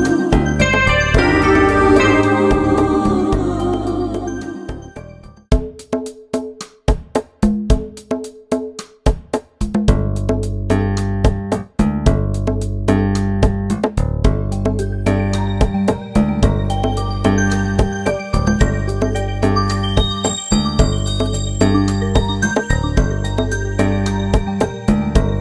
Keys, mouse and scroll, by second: 0.4 ctrl+Tab, 1.1 click, 2.4 click, 3.0 right click, 3.2 KP_1, 3.7 right click, 4.1 KP_1, 4.9 click, 5.2 ctrl+z, 5.4 Tab, 5.8 click, 6.1 Tab, 6.3 right click, 7.8 click, 7.9 middle click, 8.5 ctrl+r, 9.7 ctrl+r, 10.3 ctrl+Tab, 11.0 click, 12.4 KP_1, 12.7-13.7 middle drag, 13.7 ctrl+r, 14.2 middle click, 14.5 ctrl+r, 15.3 KP_1, 15.4 middle click, 15.7 ctrl+Tab, 16.0 right click, 17.0 KP_1, 17.2 click, 17.7 middle click, 18.2-19.9 right drag, 19.7 KP_1, 19.9 click, 20.4 middle click, 20.7 right click, 21.4 KP_1, 21.7 click, 22.7 right click, 23.5 KP_1, 23.8 click, 24.1 middle click, 24.3 click, 24.3 right click, 24.6 KP_1, 25.0 click.